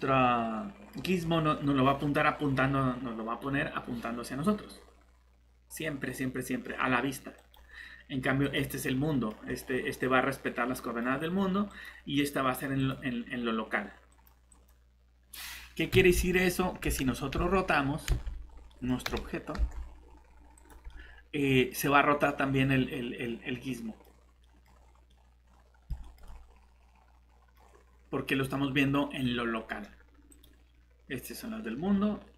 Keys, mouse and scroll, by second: 4.5 Tab, 4.5 middle click, 7.4 click, 8.8 middle click, 11.7 click, 15.5 middle click, 15.9 Escape, 16.8 s, 17.3 z, 18.1 Escape, 18.5 scroll down 1, 18.7 middle click, 19.6 z, 20.5 click, 20.9 middle click, 24.1 scroll down 1, 24.4 middle click, 24.6 scroll up 1, 25.1 middle click, 27.6 scroll up 1, 30.3 click, 31.7-32.3 scroll down 1.